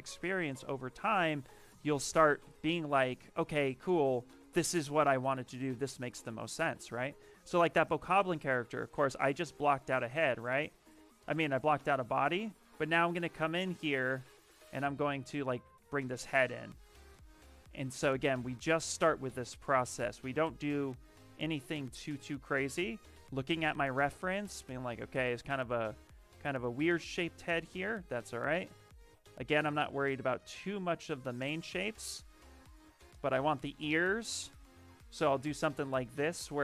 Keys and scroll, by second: 2.3 b, 6.2 t, 11.9 w, 14.2 q, 14.5 w, 15.8 z, 17.4 q, 18.1 s, 20.2 b, 20.5 v, 22.3 ctrl+z, 27.0 s, 34.0 b, 34.5 t.